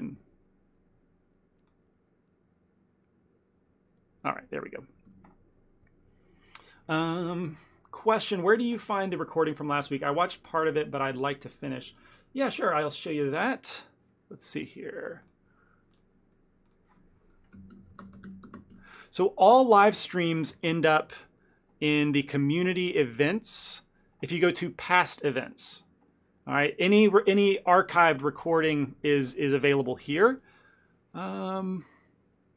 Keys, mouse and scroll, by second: 5.2 n.